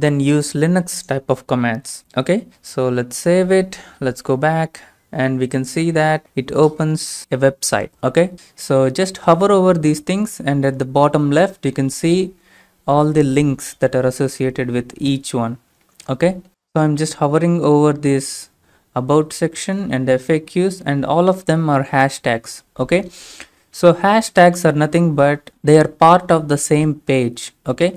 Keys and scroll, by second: 2.6 ctrl+s, 3.3 alt+Tab.